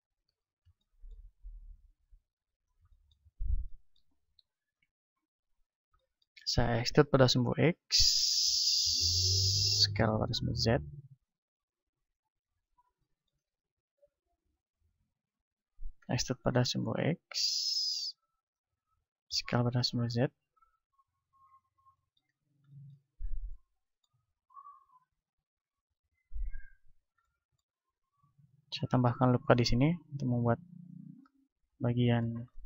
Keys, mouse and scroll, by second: 0.2 z, 0.8-1.8 middle drag, 1.8-3.6 drag, 3.6-7.8 middle drag, 4.8 ctrl+Tab, 6.9 e, 8.1-9.8 drag, 9.5 s, 10.7-14.3 drag, 13.1-16.0 middle drag, 16.0 e, 17.6-20.6 drag, 19.3 s, 21.6-23.6 drag, 23.1 z, 23.6-25.2 middle drag, 24.5 ctrl+Tab, 25.8-27.4 right drag, 26.1-28.4 drag, 29.0 ctrl+r, 29.0-30.4 middle drag, 31.0-32.6 drag, 31.3 right click, 31.7-32.6 middle drag.